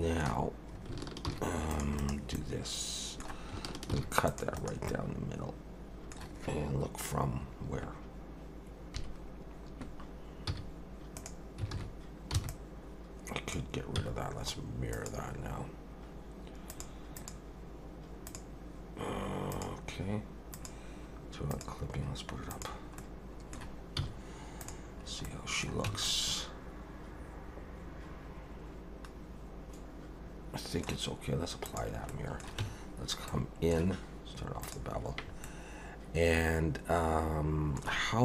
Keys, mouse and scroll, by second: 1.3 ctrl+r, 2.3 middle click, 3.9 ctrl+r, 4.9 middle click, 8.9 KP_3, 10.5 z, 11.7 alt+a, 12.3 b, 14.0 x, 16.7 click, 17.2 click, 19.5 click, 20.5 click, 21.5 click, 22.5 click, 23.0 middle click, 24.0 z, 25.0 scroll up 2, 25.2 middle click, 25.9 Tab, 26.1 middle click, 31.6 click, 32.1 middle click, 32.6 Tab, 33.3 middle click, 34.6 click, 35.4 middle click.